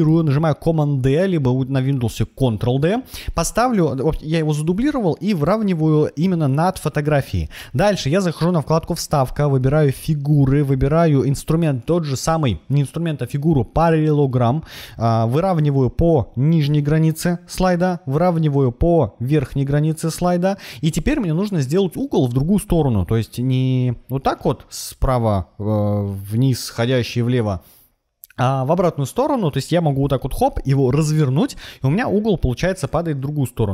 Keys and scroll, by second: 0.0 super+d.